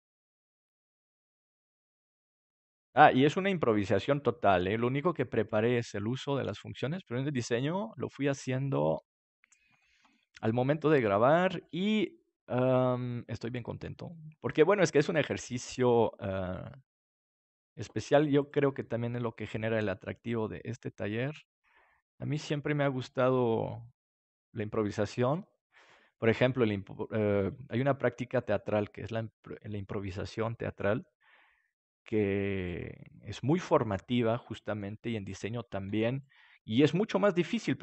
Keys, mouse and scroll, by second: 1.7 right click, 4.3 right click, 5.7 click, 6.5 right click, 9.8-10.8 middle drag, 10.8 right click, 11.4-12.5 middle drag, 11.6-13.7 drag, 11.6-12.6 right drag, 13.1-17.7 right drag, 14.0-20.9 drag, 21.3-25.6 drag, 26.2-30.9 drag, 31.7-34.0 drag, 33.1 middle click, 33.5-37.8 middle drag, 35.8 ctrl+s.